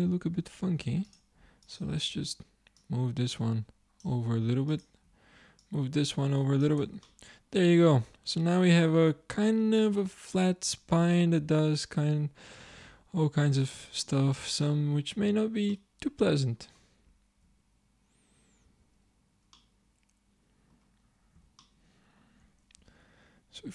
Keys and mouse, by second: 0.6 ctrl+Tab, 6.8 Tab, 7.2 middle click, 14.4 Tab, 14.8-16.6 drag, 18.7 Tab, 22.8 Tab.